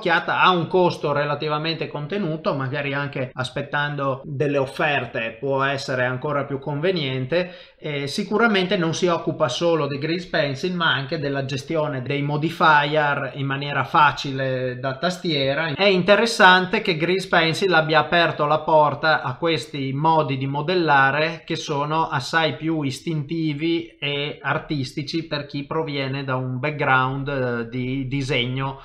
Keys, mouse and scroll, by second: 12.0 middle click, 14.7 ctrl+middle click, 15.7 middle click, 16.7 scroll up 1, 17.3 middle click, 17.3 scroll up 3, 21.5 middle click, 26.0 middle click.